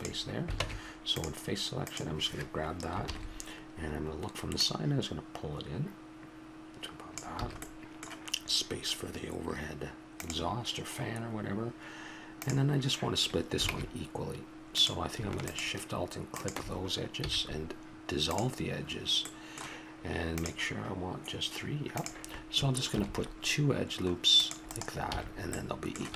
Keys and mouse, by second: 0.6 ctrl+Tab, 4.6-6.4 drag, 7.4 a, 7.6-10.1 middle drag, 13.7 ctrl+Tab, 15.5-18.3 drag, 17.2 x, 19.2-20.4 middle drag, 22.9 ctrl+r, 25.1 a.